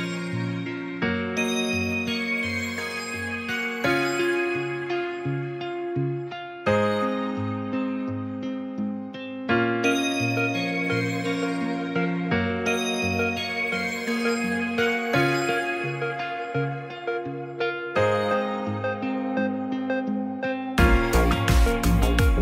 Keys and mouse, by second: 0.3 Tab, 2.1-5.8 drag, 7.1-11.1 drag, 18.2-19.7 middle drag, 21.6 Tab.